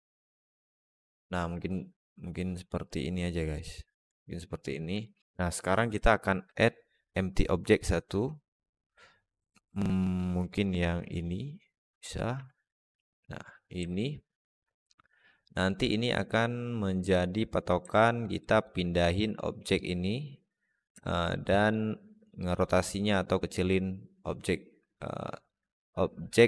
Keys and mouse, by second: 0.1-0.9 alt+middle drag, 1.4-3.4 alt+middle drag, 4.0-4.4 middle drag, 4.9 alt+middle drag, 6.1 shift+a, 10.8 s, 12.2 s, 13.7-16.8 alt+middle drag, 18.2 alt+shift+middle drag, 18.8 alt+middle drag, 20.9-21.6 alt+shift+middle drag, 24.8-25.3 alt+middle drag.